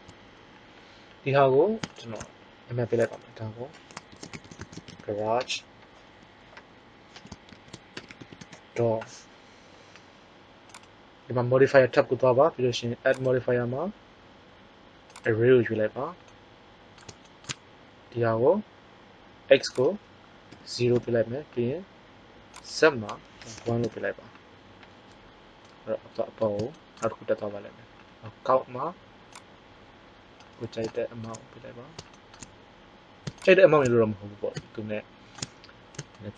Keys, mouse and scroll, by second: 3.0-5.6 drag, 8.0 o, 11.2 click, 19.6-21.6 drag, 22.5-23.6 drag, 29.4-30.9 drag, 30.9 middle click, 32.2-34.9 middle drag, 34.9-35.4 drag.